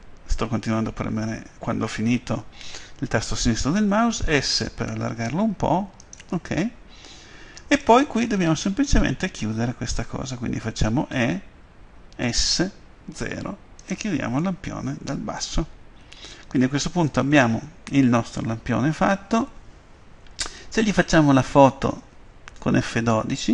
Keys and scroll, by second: 4.4 s, 11.1 f, 12.2 s, 13.2 0.